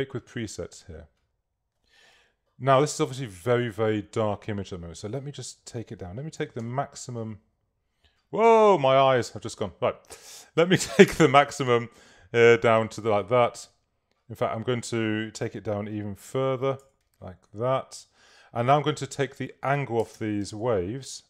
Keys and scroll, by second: 6.4 3, 6.7 Page_Up, 16.7 2, 16.9 Tab, 20.2 Tab.